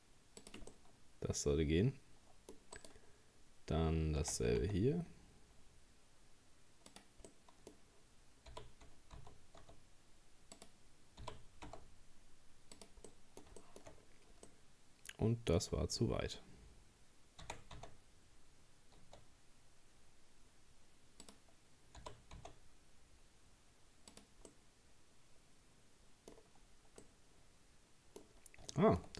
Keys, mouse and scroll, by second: 0.7-2.8 middle drag, 2.8 right click, 4.2 r, 7.3-8.5 middle drag, 8.5 g, 11.2 g, 13.1 middle click, 14.0-14.5 scroll up 1, 14.5-15.6 middle drag, 15.6-17.4 scroll down 2, 17.4 r, 22.0 g, 24.5-26.3 middle drag, 26.3-27.0 scroll down 1, 27.0-28.4 middle drag, 28.4-28.7 scroll up 1, 28.7 shift+middle click, 29.0-29.1 scroll up 4.